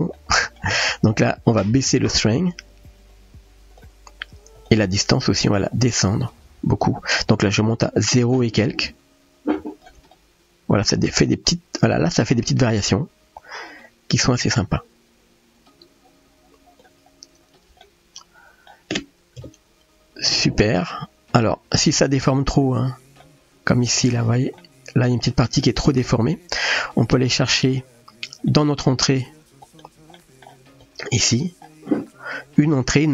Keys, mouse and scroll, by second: 0.3 middle click, 1.6-3.8 drag, 4.6-5.3 drag, 5.7-6.9 drag, 7.5-9.8 shift+drag, 10.3-12.3 middle drag, 13.8-16.8 shift+drag, 17.8-18.7 middle drag, 19.6 KP_0, 21.4-21.8 shift+middle drag, 23.2 middle click, 24.6-25.1 middle drag, 25.3-25.7 shift+middle drag, 25.8 middle click, 27.4 middle click, 28.7 middle click, 29.7 click, 30.2 middle click, 30.8 click.